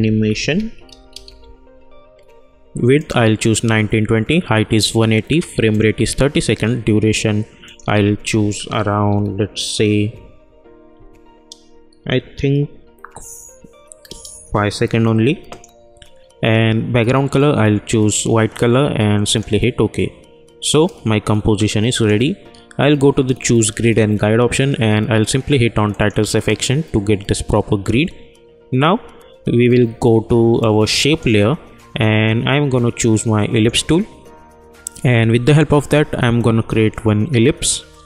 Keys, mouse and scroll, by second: 0.0-1.7 typing, 2.9 click, 12.0 Right, 15.4 click, 19.2-23.2 drag, 25.9 click, 30.5-33.5 drag, 36.4-38.0 drag.